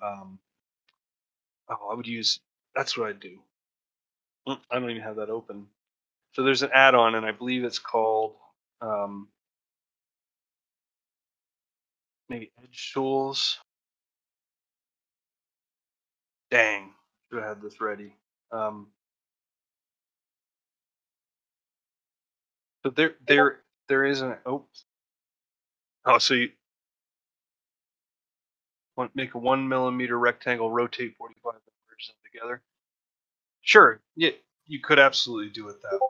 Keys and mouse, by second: 1.1 shift+middle click, 1.9-36.0 shift+middle drag.